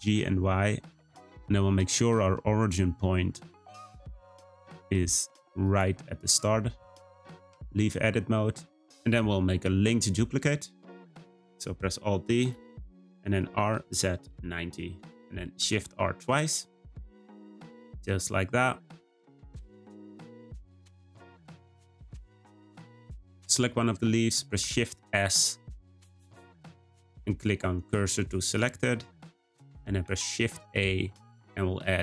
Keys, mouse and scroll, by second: 6.1 shift+middle click, 6.5-7.5 scroll up 2, 7.5 Tab, 8.5-8.8 scroll down 1, 12.4-15.4 right drag, 15.6 shift+r, 15.8 shift+r, 16.7 click, 17.0-19.9 middle drag, 19.9 shift+a, 20.8 click, 21.3 click, 24.6 shift+s, 30.0 shift+a.